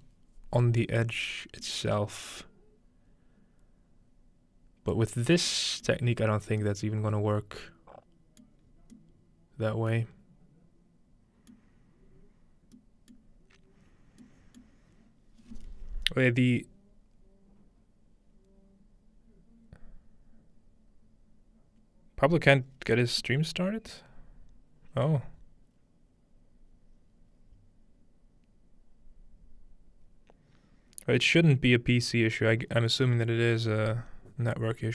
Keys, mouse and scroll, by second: 0.3-1.1 scroll up 1, 0.6-1.1 shift+middle drag, 1.5 scroll up 1, 1.6 middle click, 5.1 middle click, 5.2-6.4 scroll down 3, 5.9-6.6 middle drag, 6.4-7.1 scroll down 1, 8.4 middle click, 8.6-11.5 scroll up 2, 11.5-12.7 middle drag, 14.4 middle click.